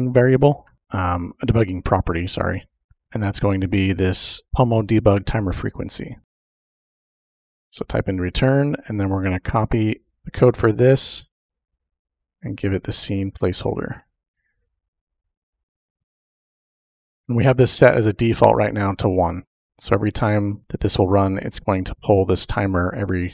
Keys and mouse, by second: 4.2 click, 6.1 click, 6.2 Return, 6.4 shift+Tab, 6.7-7.5 typing, 10.3 ctrl+v, 10.4 typing, 12.1-13.4 drag, 13.7 ctrl+c, 14.9 click.